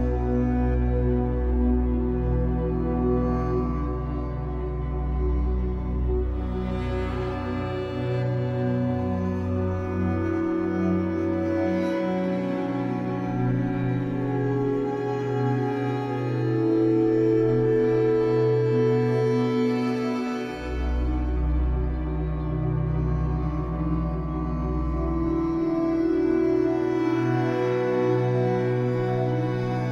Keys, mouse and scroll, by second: 1.0 Tab, 1.5-2.7 scroll up 2, 3.3-3.9 scroll up 2, 3.9-4.4 scroll up 1, 4.4 scroll up 1, 4.7 click, 5.5 shift+middle click, 5.7-6.3 scroll up 2, 6.3 click, 6.7-8.0 shift+middle drag, 8.0-9.1 drag, 9.1 KP_1, 9.6-12.0 shift+middle drag, 10.0 z, 12.0 shift+click, 12.9 KP_1, 13.7 scroll down 1, 15.0 shift+d, 16.6 click, 17.3-19.3 shift+middle drag, 19.3 click, 20.4 alt+a, 21.1 b, 24.0 click, 25.0 e, 26.5 click, 27.1 e, 28.1 click, 28.8 e, 29.6 click.